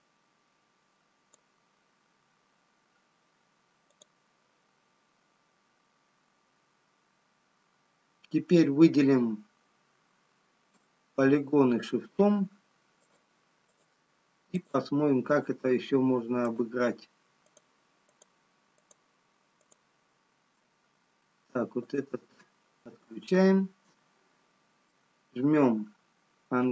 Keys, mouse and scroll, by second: 5.7 scroll up 2, 12.5 click, 14.4-24.5 shift+click, 24.5 scroll down 1, 26.2 middle click.